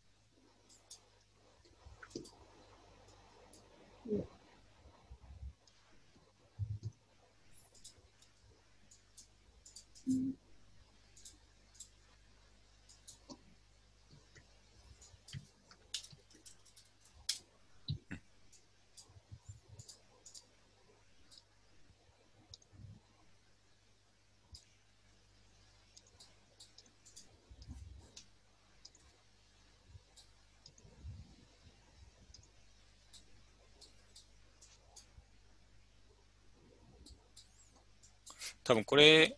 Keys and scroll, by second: 15.7-17.4 typing, 17.8 Return.